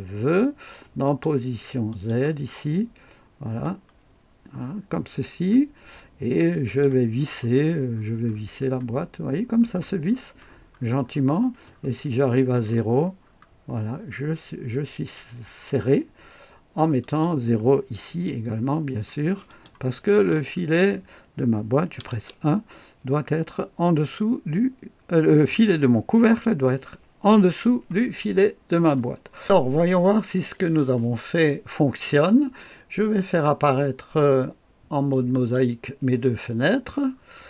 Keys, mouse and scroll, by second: 1.0 click, 1.9 click, 2.5-3.9 scroll down 2, 3.9-6.7 scroll down 1, 6.7 click, 7.1-14.0 scroll down 10, 7.2 click, 14.0-15.3 scroll up 2, 15.3-17.0 scroll up 1, 17.0 click, 18.1 KP_0, 19.5 click, 20.5-22.1 scroll up 1, 22.1 KP_1, 28.2-29.4 scroll down 2, 29.4 click, 33.5 click, 35.3 click, 37.1-37.4 scroll down 1.